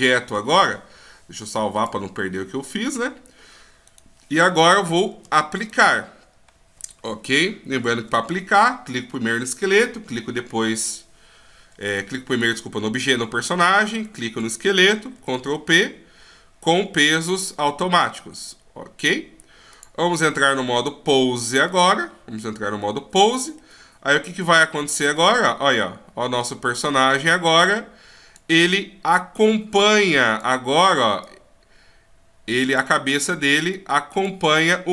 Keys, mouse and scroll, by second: 1.8 click, 3.9 right click, 5.6 shift+right click, 11.9 right click, 12.4 right click, 14.0 shift+right click, 15.2 ctrl+p, 19.7 click, 21.8 click, 23.2 right click, 23.6 middle click, 25.2 click, 29.1 click, 31.2 click, 33.7 click.